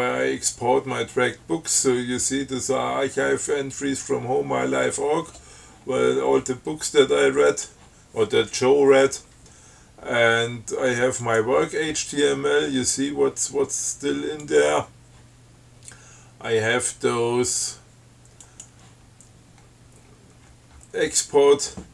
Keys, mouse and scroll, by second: 3.8 scroll up 2, 7.7 click, 11.5 click, 12.6-13.5 scroll down 4, 13.5-13.8 scroll up 2, 14.7 click, 18.7 click, 19.8-21.0 scroll down 6, 21.0-21.9 scroll up 4.